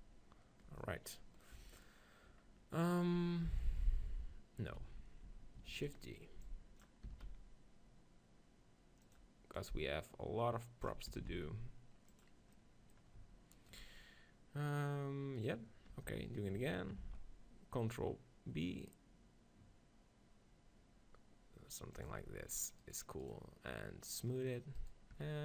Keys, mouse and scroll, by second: 1.6 KP_1, 4.9 ctrl+z, 5.7 shift+d, 5.9-7.8 right drag, 6.5-8.4 drag, 7.1 s, 9.6-11.3 drag, 11.1 s, 12.2-14.3 drag, 13.6 right click, 14.3-16.4 right drag, 15.9 Tab, 17.0 ctrl+b, 22.1 click, 22.2 Tab, 25.2 Tab.